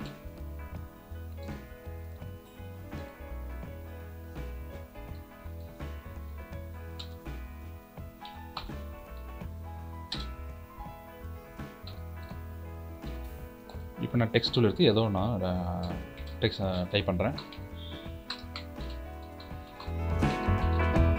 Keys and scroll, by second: 13.2 t.